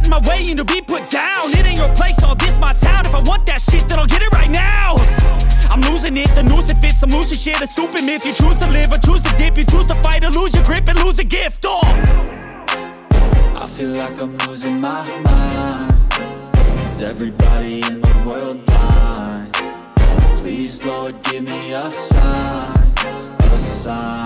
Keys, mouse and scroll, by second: 0.5 click, 1.1 click, 1.8 click, 1.9 shift+middle click, 2.8 click, 3.0 shift+middle click, 3.6 click, 3.6 scroll down 1, 3.8 scroll up 1, 3.9 shift+middle click, 4.5 click, 4.7 shift+middle click, 5.6 click, 6.7 click, 7.5 click, 8.3 click, 8.8 click, 9.0 shift+middle click, 9.6 click, 10.3 click, 10.3 space, 10.4 scroll down 1, 10.6 Tab, 10.6 middle click, 11.1 Tab, 11.2 middle click, 11.6 Tab, 11.6 middle click, 11.9 Tab, 12.0 scroll down 1, 12.2 Tab, 12.3 middle click, 12.4-12.8 shift+scroll up 2, 12.6 middle click, 12.8 middle click, 13.1 z, 13.3 click, 13.6 Tab, 13.6 click, 13.8 ctrl+middle click, 14.0 Tab, 14.1-14.5 scroll up 2, 14.3 ctrl+x, 14.3 click, 14.4 ctrl+middle click, 14.6 shift+middle click, 14.6 ctrl+z, 14.9 click, 15.6-18.1 typing, 15.8 click, 16.3 click, 16.6 shift+middle click, 17.0 scroll up 1, 17.1 click, 17.3 shift+scroll down 1, 17.4 shift+middle click, 17.5 scroll up 1, 18.0 click, 18.2 shift+middle click, 18.8 shift+scroll up 1, 18.9 shift+middle click, 19.0 click, 19.6 c, 19.8 click, 19.9-21.2 shift+middle drag, 21.2 click, 22.1 click, 22.6 scroll down 1, 22.7 shift+middle click, 22.8 scroll up 1, 23.6 click, 23.6 scroll down 1, 23.7 shift+middle click, 23.9 scroll up 1.